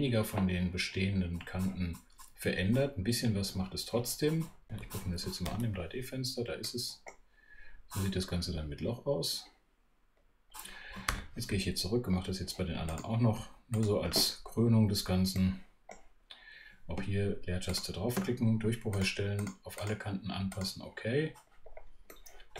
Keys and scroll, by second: 5.4 shift+super+3, 11.1 super+2, 16.9 space.